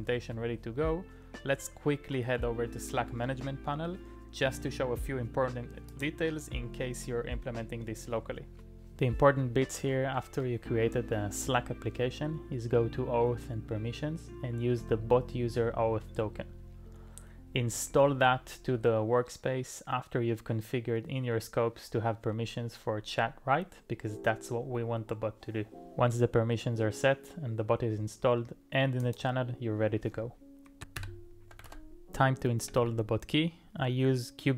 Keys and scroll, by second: 31.0 super+m, 31.5 i, 31.7 super+v, 32.6 j, 32.8 j.